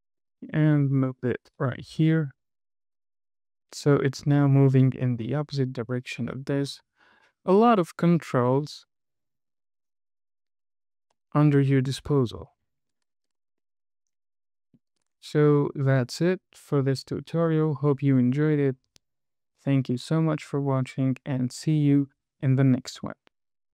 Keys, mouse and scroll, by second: 0.6 g, 1.9 click, 2.2 space, 7.2-7.6 scroll down 4, 8.0-8.5 middle drag, 12.5 KP_1, 13.0-13.8 scroll up 4, 14.0 shift+middle click, 15.8 shift+middle click.